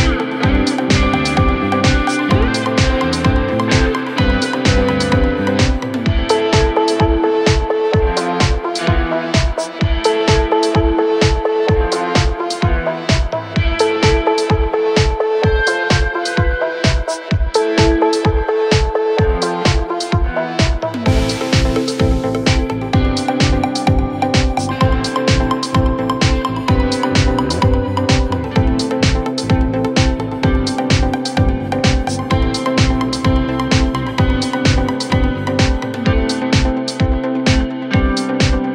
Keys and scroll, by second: 13.4 ], 18.7 4, 19.5 2, 20.3 ], 21.7 4, 23.4 ctrl+d, 23.5 Escape.